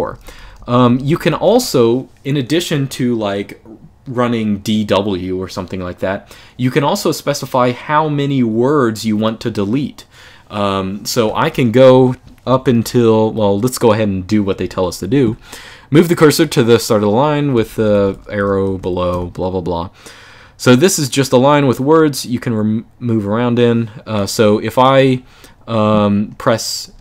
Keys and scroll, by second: 0.0-1.0 typing, 11.6-13.1 typing, 14.2 k, 17.0-19.3 typing, 26.5-27.0 typing.